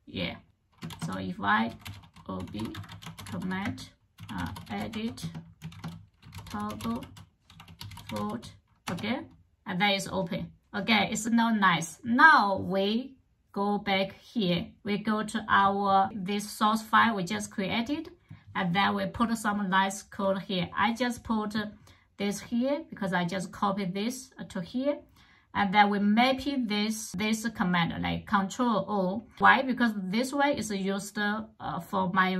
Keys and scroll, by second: 0.4 ctrl+[, 0.4-8.5 typing, 8.7 Return.